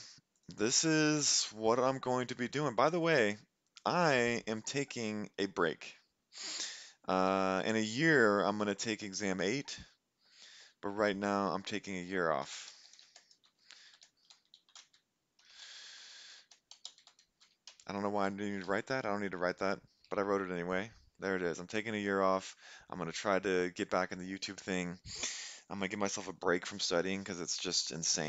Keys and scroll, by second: 12.2-17.6 typing, 17.7 Return, 18.7 Up.